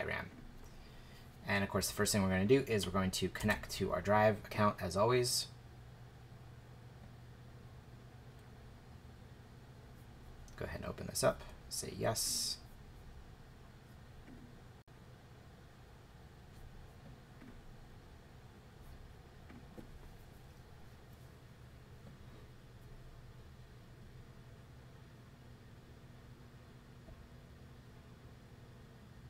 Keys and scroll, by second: 3.4 shift+Return.